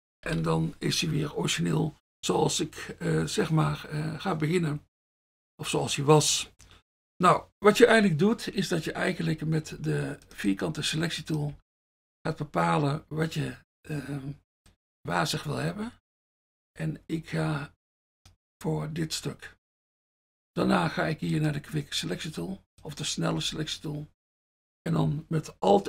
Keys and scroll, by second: 9.9 F1, 20.8 F1, 23.5 F1.